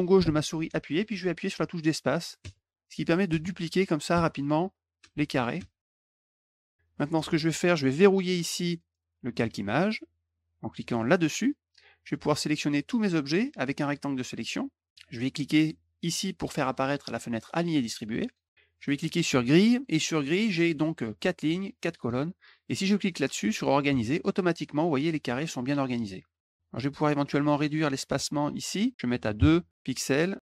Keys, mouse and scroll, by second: 2.2-6.3 typing, 10.9 click, 12.3-14.3 drag, 18.1 click, 19.2 click, 23.7 click, 28.7 click, 29.9 click, 30.2 click.